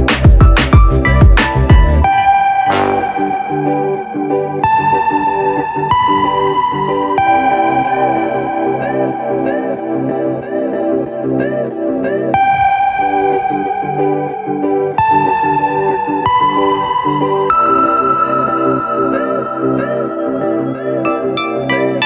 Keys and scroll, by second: 5.0 v, 12.5 Return.